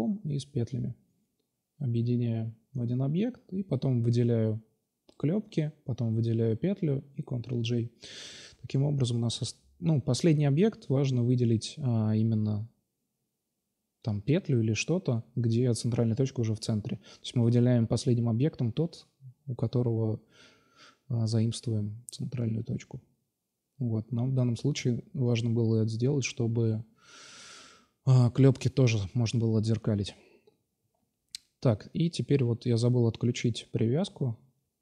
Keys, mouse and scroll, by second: 1.5 ctrl+j, 1.9 Tab, 2.4 Tab, 3.2 ctrl+a, 3.9 Tab, 4.5 a, 4.5 a, 4.9 ctrl+n, 5.2 Tab, 6.0 right click, 6.5 ctrl+j, 6.7 middle click, 9.4 click, 10.3 ctrl+j, 10.5-11.6 middle drag, 15.4-16.0 middle drag, 16.4-17.7 middle drag, 17.7 ctrl+s, 19.8 alt+F5, 20.5-21.7 drag, 21.3 Tab, 21.8 middle click, 23.6 ctrl+r, 24.6 s, 27.7 s, 29.2-29.9 drag, 29.9 s, 32.8 x, 33.7 ctrl+z, 33.9 ctrl+z, 34.2 ctrl+z.